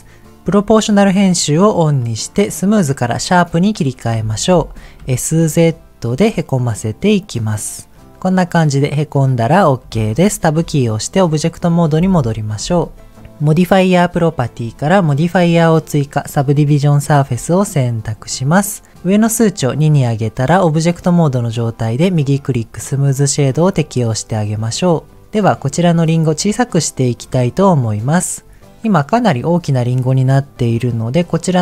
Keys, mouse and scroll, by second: 1.0 click, 1.8-4.1 drag, 5.1 s, 5.4 z, 7.1-7.9 scroll up 2, 7.9-9.4 middle drag, 7.9 click, 10.5 Tab, 13.3 click, 19.7 click, 22.0-23.0 right drag, 23.5-24.4 scroll up 1, 25.5 click, 27.2 click.